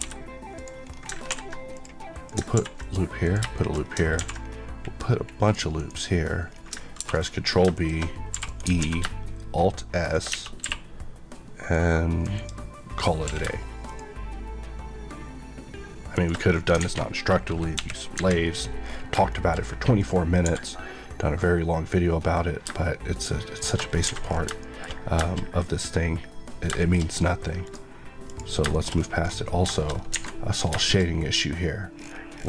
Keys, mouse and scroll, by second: 0.4 click, 0.8-1.2 scroll up 2, 1.2 ctrl+r, 1.6 click, 2.2 click, 2.5 ctrl+r, 2.7 click, 3.5 middle click, 3.7 scroll up 1, 4.1 ctrl+r, 4.3 scroll up 1, 5.0-5.4 scroll up 1, 5.4 click, 5.7 right click, 6.4 scroll up 1, 6.9 ctrl+b, 7.6 shift+click, 8.3 e, 8.4 right click, 8.7 alt+s, 10.0 shift+click, 10.2 Tab, 10.5 q, 11.6 click, 12.3 click, 12.3 Left, 13.2 Left, 13.2 q, 13.8 shift+click, 16.1 shift+click, 16.4 scroll down 1, 16.7 alt+a, 17.6 KP_1, 18.8 scroll down 1, 19.2 shift+middle click, 19.5-19.9 scroll up 1, 19.9 click, 20.3 g, 22.6 shift+g, 23.5 shift+click, 23.9 scroll down 3, 24.5 middle click, 26.7 middle click, 27.1 scroll up 1, 27.5 click, 28.2 click, 28.7 middle click, 28.8 scroll up 1, 29.6 middle click, 29.8 scroll up 1, 30.0 alt+a, 30.7 middle click, 31.0 scroll up 1, 31.9 scroll down 1.